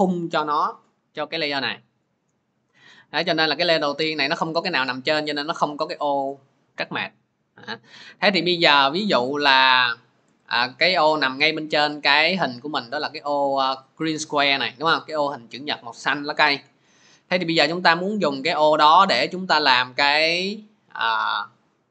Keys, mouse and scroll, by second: 3.8 click, 5.6 click, 18.1 click, 18.7 click.